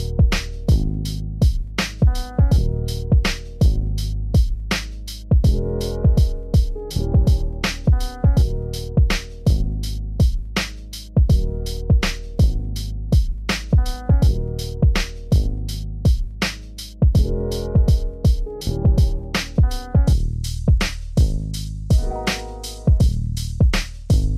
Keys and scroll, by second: 23.1 ctrl+a.